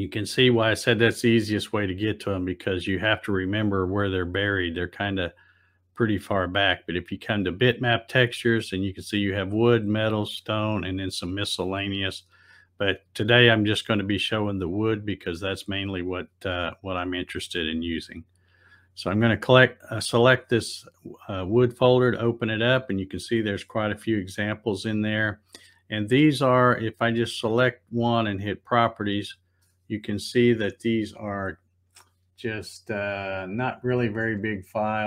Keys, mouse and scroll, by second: 6.0 click, 6.2 click, 18.4 click, 18.6 click, 27.0 right click, 28.7 click.